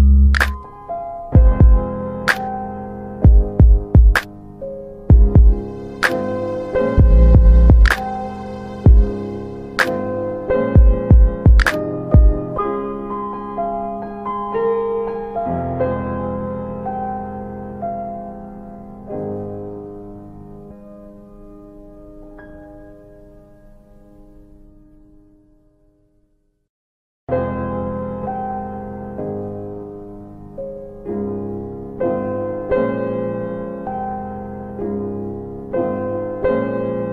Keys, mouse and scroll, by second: 0.9 click, 2.9 ctrl+a, 4.9 click, 10.2 s, 11.3 ctrl+alt+middle click, 13.2 click, 15.0 click, 21.2 Delete, 25.7 click, 31.0 w, 32.9 click, 36.2 w.